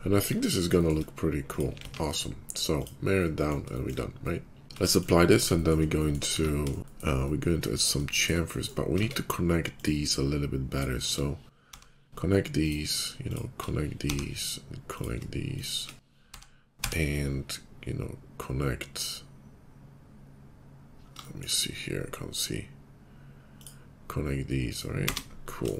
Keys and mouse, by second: 0.1 KP_5, 1.3 click, 1.8 alt+x, 2.7 click, 4.6 q, 4.8-9.5 shift+middle drag, 6.3 Tab, 8.8 Tab, 9.5 click, 10.6 shift+click, 11.6 j, 14.0 j, 15.4-25.7 shift+middle drag, 16.2 j, 16.7 k.